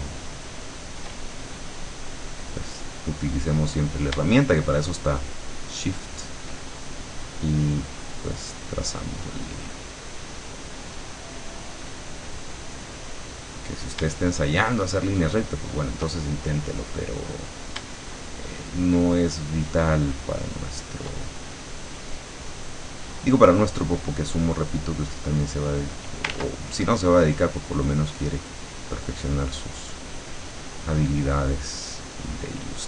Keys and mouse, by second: 1.5 shift+click, 2.8 click, 4.2-6.6 shift+drag, 7.6 click, 9.0 click, 9.8 click, 12.2-13.9 drag, 14.4-16.1 shift+drag, 16.4-17.6 shift+drag, 19.2-21.2 shift+drag, 21.4-22.8 shift+drag, 25.1 click, 26.4 ctrl+z, 26.8-28.0 ctrl+drag, 29.1-30.7 drag, 32.4 click.